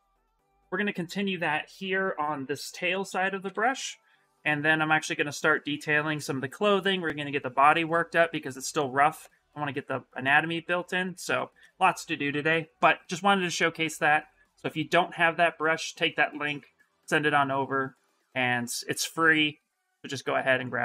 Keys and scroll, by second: 2.7 shift+f, 3.2 shift+f.